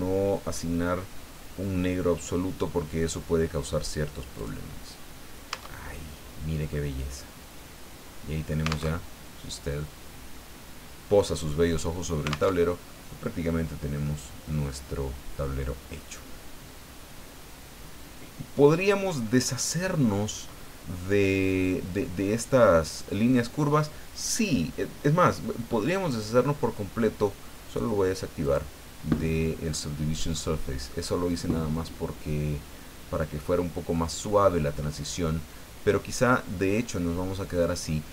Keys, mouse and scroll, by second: 4.3 click, 5.5 Tab, 6.2-6.5 scroll down 2, 6.7-8.9 drag, 8.9 alt+Tab, 12.5 alt+Tab, 14.0 click, 15.4-15.9 scroll up 2, 16.2 scroll up 2, 17.0 scroll down 2, 26.1 click, 28.4 click, 29.5-30.5 middle drag, 30.6 scroll down 2, 30.9-33.7 middle drag, 33.9-36.4 middle drag, 36.7-37.3 scroll up 2, 37.3 scroll down 2, 37.9 scroll down 2.